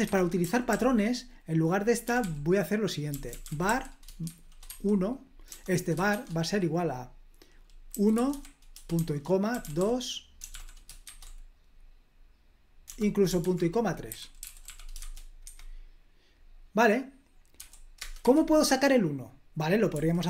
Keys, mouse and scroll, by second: 0.0 Escape, 0.4-0.7 typing, 2.0-6.1 typing, 7.6-11.0 typing, 12.8-15.5 typing, 17.5 typing, 17.9 Return, 18.2 Escape, 19.9-20.2 typing.